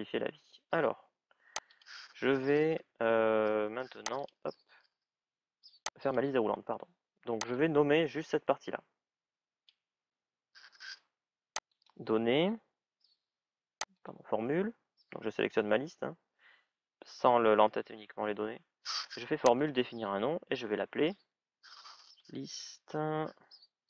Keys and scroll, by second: 21.9 shift+l.